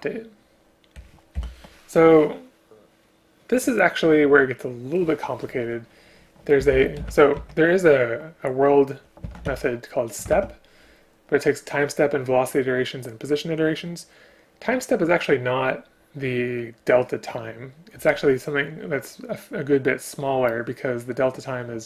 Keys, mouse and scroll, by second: 1.4 Delete, 10.3 ctrl+q.